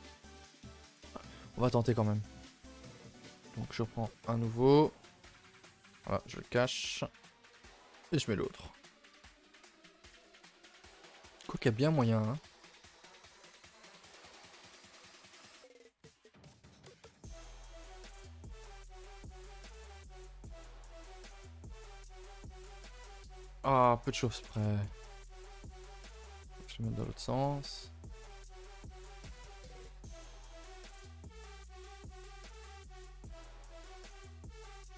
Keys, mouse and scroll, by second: 0.2 a, 0.4 a, 1.1 click, 2.7 shift+click, 3.7 shift+d, 5.3 h, 5.7 click, 6.1 shift+click, 6.6 KP_0, 7.2 scroll up 1, 7.4 shift+middle drag, 7.7 scroll down 1, 8.0-9.6 scroll up 1, 9.6 g, 11.9 scroll down 1, 12.1-12.5 shift+middle drag, 12.5-12.8 scroll down 1, 12.8-13.3 scroll up 1, 13.3-16.0 typing, 17.2 r, 18.9 g, 19.4 r, 20.9 r, 22.5 g, 24.1 z, 24.3 shift+middle click, 24.6-25.0 scroll up 1, 25.2 r, 27.0 z, 28.3 r, 29.7 r, 31.9 z, 32.5 r, 34.3 z, 34.6 r.